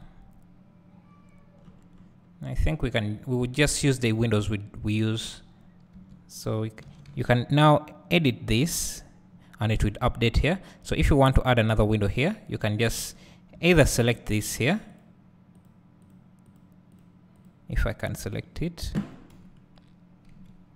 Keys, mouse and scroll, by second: 0.0 KP_Decimal, 1.1 scroll down 1, 2.9 `, 3.1-3.7 scroll down 1, 5.5 scroll up 1, 5.7 scroll down 1, 7.1 s, 13.3 Tab, 14.6 click, 19.3 KP_1, 20.3 KP_Decimal.